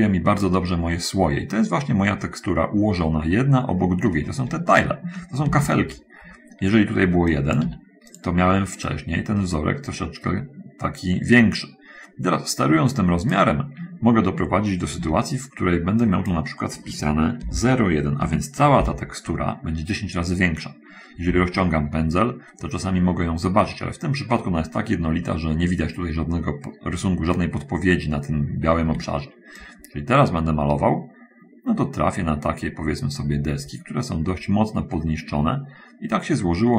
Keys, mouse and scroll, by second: 1.2 middle click, 1.7 middle click, 5.8 ctrl+z, 6.5-7.7 middle drag, 7.7 click, 7.9 1, 9.2-13.8 drag, 15.3 ctrl+z, 16.4 click, 18.5 1, 19.1 Return, 21.5 f, 29.0 Escape, 29.9-36.7 drag.